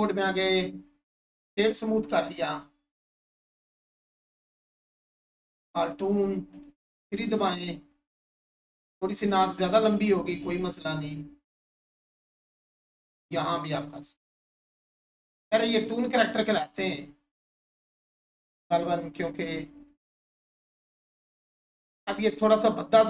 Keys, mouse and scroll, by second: 0.0 right click, 0.4 click, 2.9-3.9 scroll down 1, 4.2 alt+click, 6.5 Tab, 7.4 3, 9.0 click, 13.2 click, 17.4 1, 19.3 click, 20.5-22.3 scroll up 1.